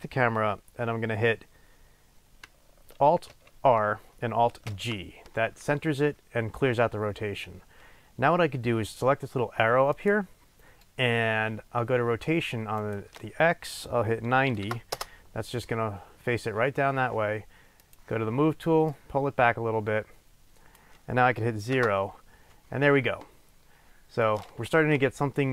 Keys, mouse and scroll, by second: 3.4 alt+r, 10.0-18.3 drag, 15.1 Return, 19.1-25.5 drag, 21.9 KP_0.